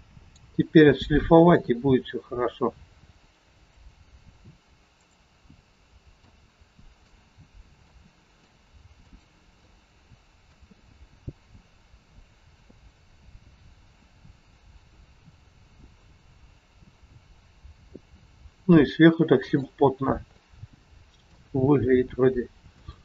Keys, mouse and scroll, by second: 3.6 click, 5.2 click, 9.6 shift+middle click, 10.7 middle click, 20.8 shift+middle click, 20.8 scroll up 6, 21.6 scroll up 1, 22.2 scroll down 1, 22.8 shift+middle click.